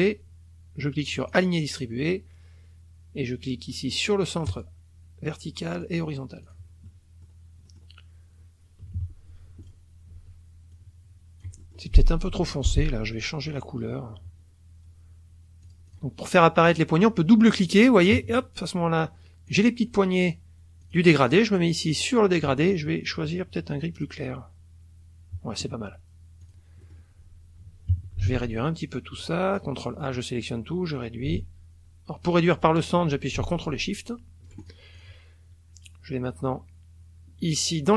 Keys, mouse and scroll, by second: 1.1 click, 4.5-6.1 drag, 6.4 click, 6.9 middle click, 7.7 middle click, 9.0 KP_Subtract, 9.6 click, 10.7-11.9 ctrl+shift+drag, 12.3 F2, 15.6 click, 16.6 click, 17.6 click, 19.5 click, 20.8 click, 21.9 click, 24.0 click, 26.4 click, 26.8 middle click, 26.8 scroll up 2, 27.9 KP_Subtract, 28.3 ctrl+a, 29.6-34.9 ctrl+drag, 35.0 ctrl+shift+click.